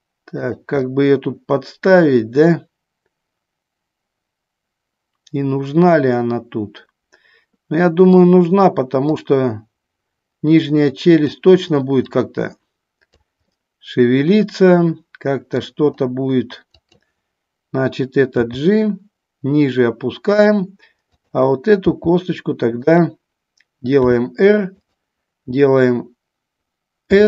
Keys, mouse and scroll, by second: 0.7 click, 1.0-8.5 middle drag, 9.3-11.4 drag, 12.3 click, 13.6-15.8 middle drag, 16.9 click, 18.5 g, 21.2 click, 22.0 g, 23.0 click, 24.1 r, 24.9 click.